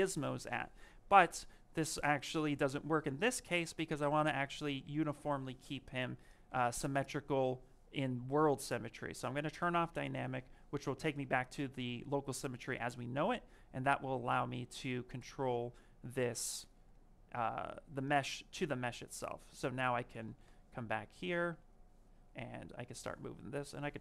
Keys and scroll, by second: 19.8-20.7 typing.